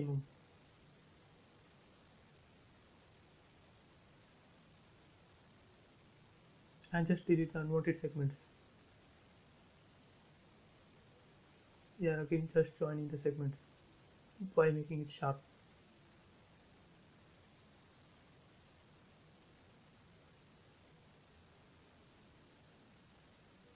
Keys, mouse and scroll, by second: 1.3 shift+space, 1.9 ctrl+shift+z, 2.8 shift+f, 3.5 shift+click, 4.5 shift+3, 4.9 shift+m, 5.3 shift+Return, 5.7 shift+space, 6.1-6.9 shift+scroll up 1, 6.9 shift+e, 7.1 shift+click, 7.4 shift+space, 7.8 shift+e, 8.2 shift+click, 9.3 shift+space, 9.5 shift+scroll down 1, 10.4 shift+middle click, 11.2-12.3 scroll up 1, 12.3 l, 12.9 click, 14.4 scroll up 1, 21.4 shift+Num_Lock, 21.4 scroll up 1, 23.4 click.